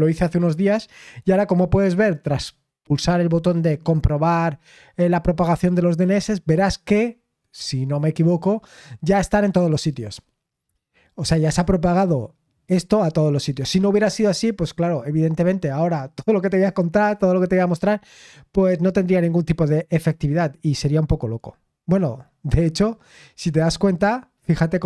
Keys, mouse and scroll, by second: 0.4 click, 22.8-23.2 scroll down 1.